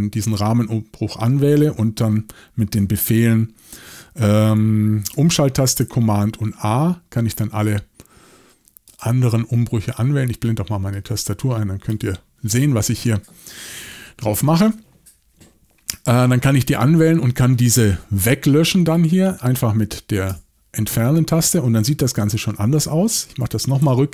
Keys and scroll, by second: 6.6 shift+super+a, 20.3 BackSpace, 22.2 typing, 23.8 super+z.